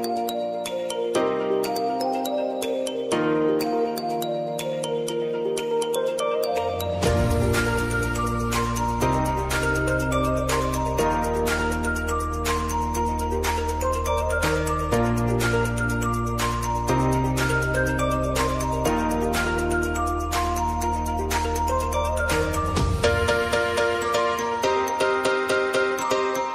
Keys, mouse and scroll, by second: 3.9 Return, 4.6-7.7 drag, 7.7 ctrl+alt+Home, 9.2-19.7 drag, 20.3 click, 25.0-26.5 typing.